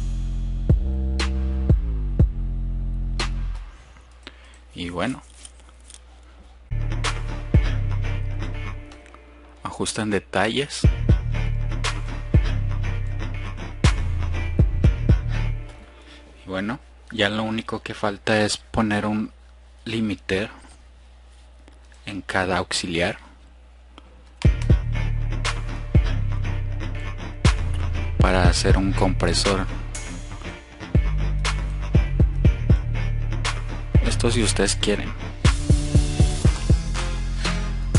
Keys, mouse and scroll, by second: 3.7 click, 3.8 F1, 10.9-11.7 drag, 24.9-25.8 drag, 27.3 click, 28.9 click, 31.0-31.4 drag, 34.1 click, 36.3 click.